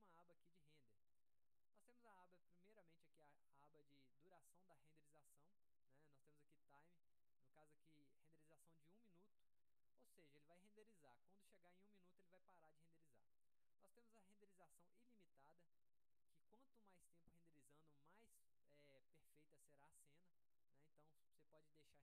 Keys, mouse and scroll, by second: 7.9 click, 15.4 click.